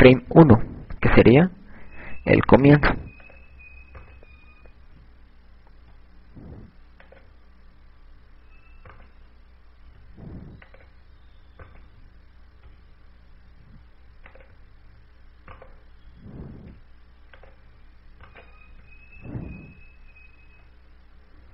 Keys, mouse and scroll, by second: 5.4 right click, 7.2 i, 9.3 right click, 11.2 i, 13.0 right click, 13.8 i, 16.7 right click, 17.7 i.